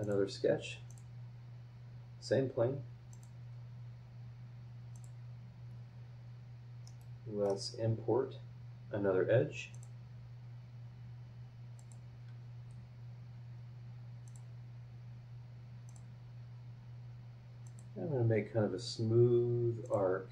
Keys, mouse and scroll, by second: 0.0 click, 0.9 click, 1.5 scroll down 1, 3.1 click, 4.9 click, 5.8 scroll up 1, 6.8 middle click, 7.0 click, 7.0 right click, 7.5 middle click, 7.8 scroll up 2, 9.7 click, 11.8 click, 14.2 click, 15.8 click, 17.6 click, 18.0-18.6 scroll down 3, 19.8 click.